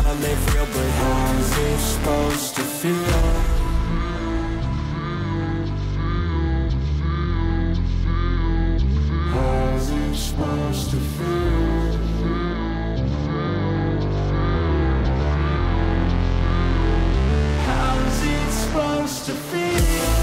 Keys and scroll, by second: 2.1 ctrl+u, 12.3 ctrl+u.